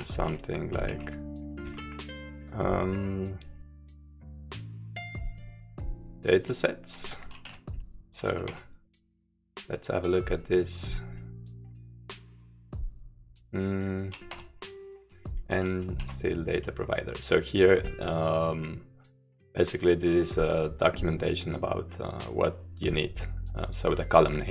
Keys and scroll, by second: 0.0-2.3 typing, 5.4 s, 7.1 Return, 7.5-12.2 typing, 16.8-18.1 typing, 19.5 j, 22.2 k, 22.4-24.5 k.